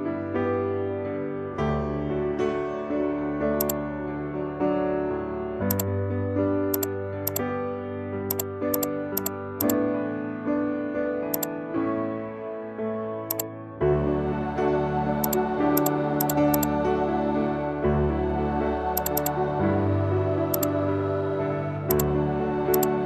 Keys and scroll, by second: 17.9 ctrl+0.